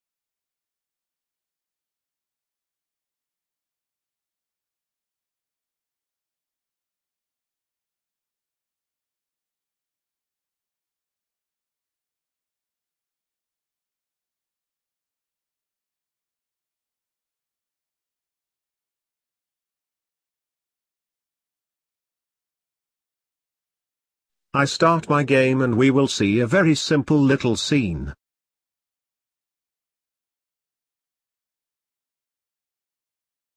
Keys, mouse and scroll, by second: 1.0 click, 2.6 click, 3.4-10.1 drag, 10.1-11.9 scroll up 3, 11.9-12.4 scroll up 2, 12.0 click, 12.4 middle click, 12.9 scroll down 2, 13.0 middle click, 13.8 click, 14.8 click, 15.2 scroll up 1, 15.3-17.0 middle drag, 17.5 click, 17.8 middle click, 18.1-18.7 scroll down 1, 19.2 click, 19.7 click, 20.3 scroll down 1, 20.5 scroll up 1, 20.6 middle click, 20.9 ctrl+s, 21.0-21.6 scroll down 2, 21.2 middle click, 24.0-25.8 scroll down 1, 25.8 scroll down 1, 25.9 click.